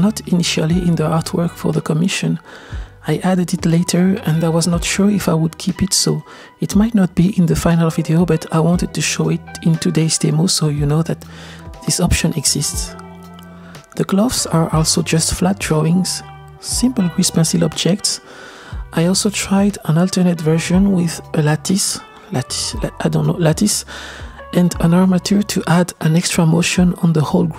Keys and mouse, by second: 0.4-1.1 shift+middle drag, 2.4-3.3 shift+middle drag, 6.1-7.1 shift+middle drag, 9.0 click, 9.7 drag, 12.6-13.5 middle drag, 16.6 alt+h, 17.8-18.4 middle drag, 19.5-20.3 shift+middle drag, 19.5 shift+a, 20.9 drag, 22.8-27.0 middle drag.